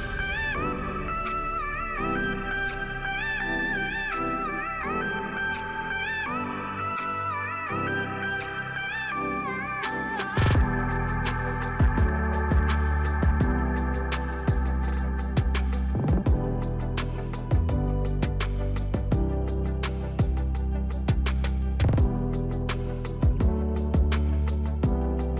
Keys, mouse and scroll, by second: 1.3 click, 2.5 z, 3.6 click, 5.0 click, 5.8 Delete, 7.1 click, 8.2-15.9 drag, 17.7 click, 19.3 ctrl+z, 20.7 click, 21.6 ctrl+z, 23.4 click, 24.0 ctrl+z, 25.1 click.